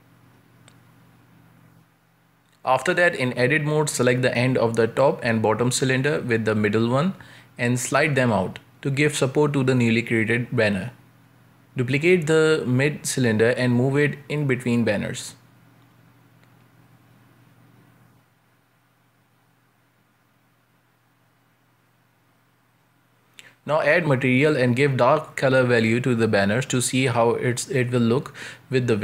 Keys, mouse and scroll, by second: 1.4-1.7 scroll up 2, 1.7 shift+middle click, 2.3 scroll up 1, 2.9 right click, 3.5 Tab, 3.9 scroll down 2, 4.1 shift+middle click, 4.4 z, 4.9 a, 5.2 a, 5.2 b, 6.7 shift+middle click, 7.0 scroll up 1, 7.2 g, 8.8-9.2 scroll down 1, 9.2 shift+middle click, 9.7 b, 10.6 shift+middle click, 11.2 b, 12.4 shift+middle click, 12.9 shift+d, 15.1 shift+Tab, 15.4 g, 18.3-18.9 shift+middle drag, 18.9 Tab, 19.5 z, 20.5-21.0 middle drag, 21.0-21.3 scroll down 2, 21.3 right click, 21.8 ctrl+space, 23.3-25.8 drag, 26.5 z, 27.2-27.7 middle drag, 27.7-28.2 scroll up 4, 28.2 ctrl+space, 28.6 a, 28.8 a.